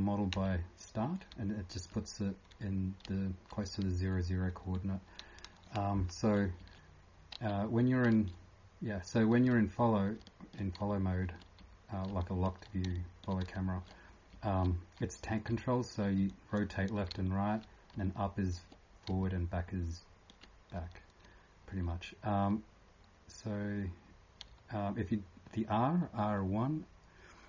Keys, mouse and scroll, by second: 1.1-3.8 typing, 6.1-10.1 typing, 11.6-14.0 typing, 17.9-20.7 typing.